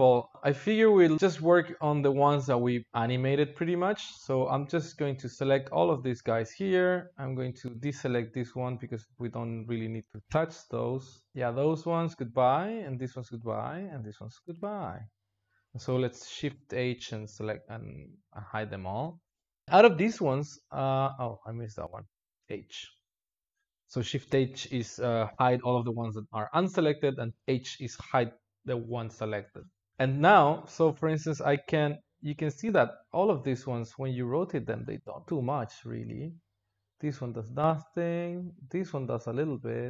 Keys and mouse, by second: 3.8 click, 6.9 ctrl+click, 8.3 ctrl+click, 11.3-12.1 ctrl+drag, 13.3 ctrl+drag, 17.4 shift+h, 18.6 click, 19.6 click, 22.3 h, 23.1 drag, 26.1-27.6 drag, 30.4 drag, 35.5 click, 35.9 r, 37.2 click, 37.8 r, 39.4 click.